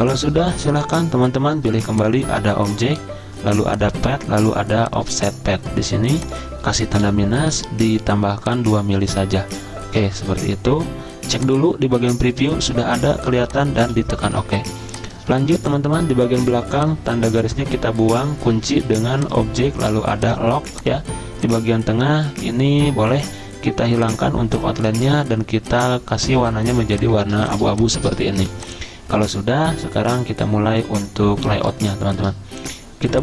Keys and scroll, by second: 0.3 v, 7.0 -, 10.0 BackSpace, 10.2 BackSpace, 10.3 BackSpace, 13.8 z, 15.6 v, 26.2 z, 28.4 v.